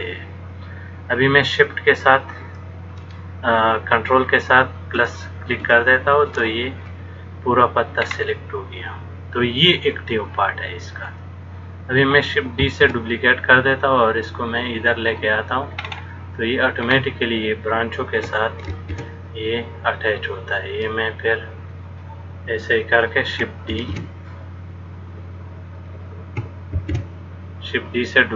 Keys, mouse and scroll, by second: 5.2 ctrl+KP_Add, 5.9 ctrl+KP_Add, 6.5 ctrl+KP_Add, 8.2 scroll up 2, 12.9 shift+d, 16.0-17.1 scroll up 3, 17.1-18.5 scroll up 1, 18.9 shift+d, 24.0 shift+d, 27.0 shift+d.